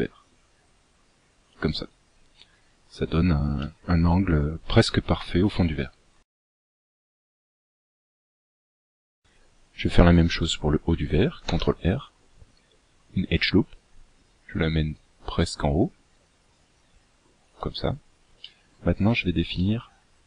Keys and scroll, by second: 11.0 ctrl+r.